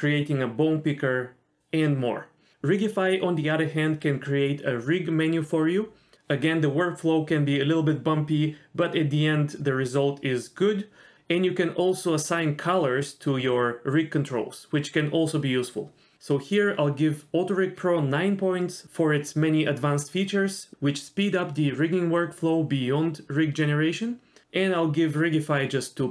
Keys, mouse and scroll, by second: 0.1 middle click, 0.2 middle click, 0.7 click, 1.0 click, 1.2 click, 1.3 middle click, 1.9 click, 2.9 click, 3.6 click, 3.8 middle click, 4.1 click, 4.6 middle click, 4.8 click, 5.1 click, 5.5 click, 5.8 f, 6.0 click, 6.5 click, 6.6 click, 6.7 middle click, 6.8 click, 6.9 click, 7.0 click, 7.1 middle click, 7.3 click, 7.5 middle click, 7.9 middle click, 8.4 middle click, 8.6 click, 9.2 middle click, 10.3 middle click, 12.5 click, 12.7 click, 12.9 click, 13.4 click, 13.5 click, 13.6 middle click, 14.0 shift+middle click, 14.1 click, 14.8 middle click, 15.2 click, 15.8 click, 16.2 click, 16.5 click, 16.9 middle click, 17.0 click, 17.2 click, 17.3 click, 17.6 middle click, 17.7 click, 17.8 middle click, 17.9 click, 18.3 middle click, 18.7 middle click, 18.9 shift+middle click, 19.3 middle click, 19.4 Tab, 19.5 shift+middle click, 19.7 middle click, 19.9 shift+middle drag, 20.0 middle click, 20.5 click, 20.9 Tab, 21.1 click, 21.3 click, 21.4 g.